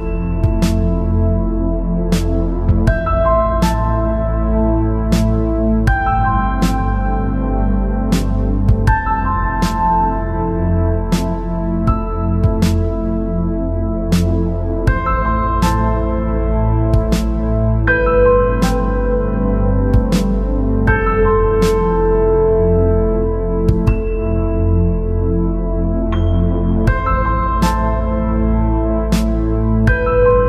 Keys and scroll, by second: 0.0 space.